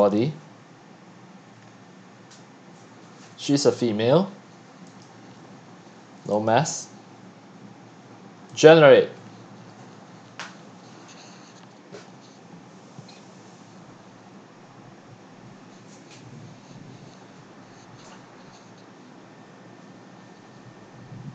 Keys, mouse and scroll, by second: 4.8 click, 8.5 click.